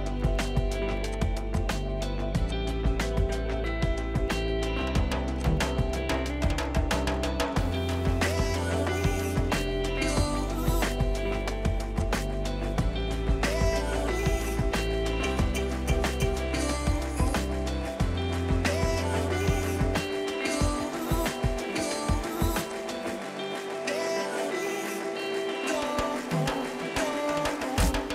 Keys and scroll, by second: 9.5 r, 11.5 p, 12.7-14.1 typing, 20.5 p.